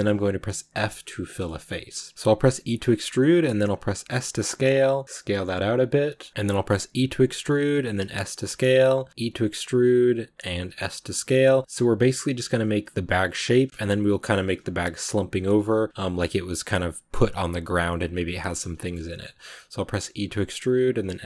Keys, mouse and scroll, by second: 0.6 f, 1.1 middle click, 1.3 scroll up 1, 1.6 middle click, 2.1 ctrl+z, 2.4 e, 6.3 middle click, 6.7 e, 8.5 shift+middle click, 9.1 e, 10.5 s, 14.1 middle click, 14.9 s, 18.3 middle click, 18.5-18.9 scroll up 2, 18.7 shift+middle click, 18.9 middle click, 19.2 scroll down 1, 19.8 e.